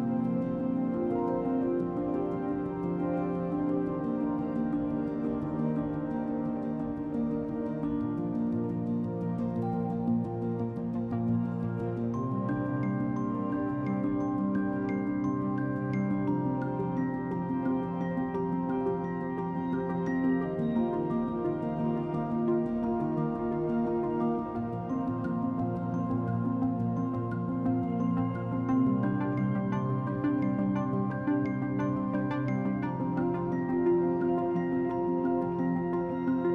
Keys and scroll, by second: 22.6 e, 23.5 b.